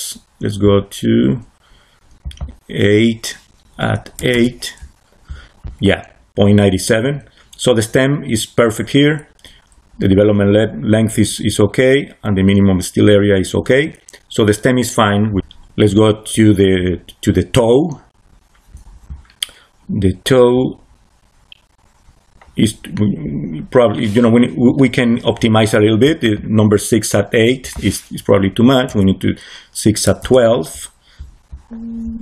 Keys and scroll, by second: 4.1 8, 4.2 Return, 28.8 1, 30.1 Return.